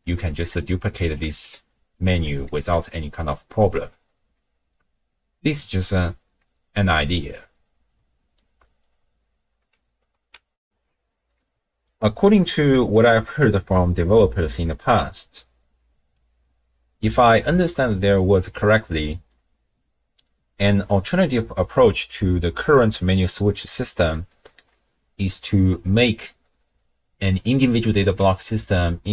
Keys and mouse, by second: 0.2 middle click, 1.0 click, 1.3 ctrl+shift+d, 2.5 middle click, 3.9 click, 10.6 ctrl+alt+shift+w, 10.7 ctrl+alt+shift+q, 22.3 click, 24.1 middle click.